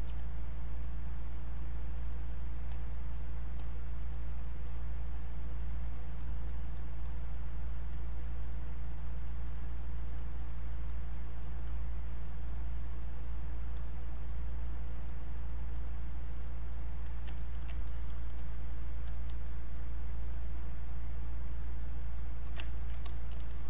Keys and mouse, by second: 0.2 click, 17.4 ctrl+right click, 17.9 click, 17.9 click, 18.5 click, 19.5 click, 22.6 ctrl+right click, 22.9 click, 23.5 alt+click.